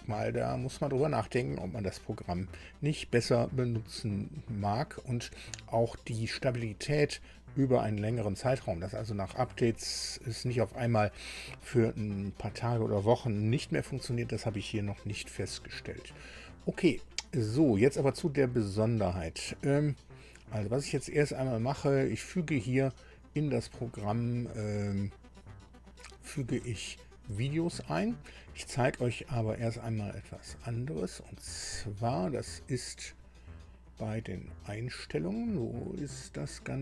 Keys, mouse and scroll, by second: 31.5 click.